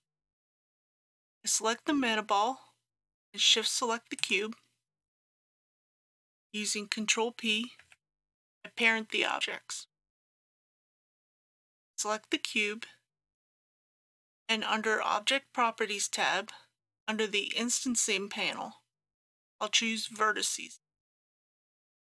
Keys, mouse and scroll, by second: 4.2 shift+click, 7.8 ctrl+p, 9.9-11.0 drag.